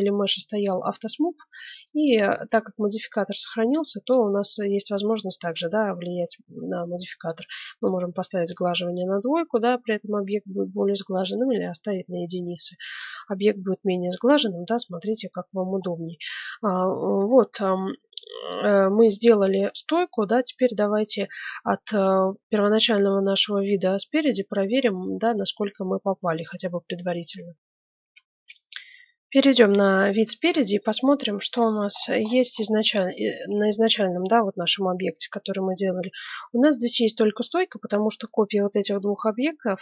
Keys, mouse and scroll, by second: 1.0 middle click, 1.8-3.6 drag, 3.6-6.8 middle drag, 7.2-9.0 drag, 7.8 middle click, 9.0 middle click, 11.2-13.0 drag, 11.6-14.8 middle drag, 16.3-18.7 middle drag, 20.8-24.4 middle drag, 28.0 F9, 30.4 KP_1, 31.2-33.1 middle drag, 33.4-38.3 middle drag.